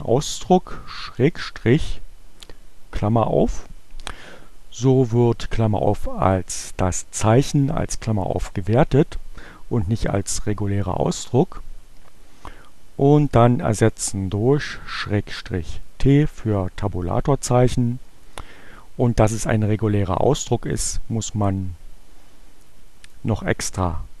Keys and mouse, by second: 13.0 click, 14.8 t, 22.3-23.4 drag.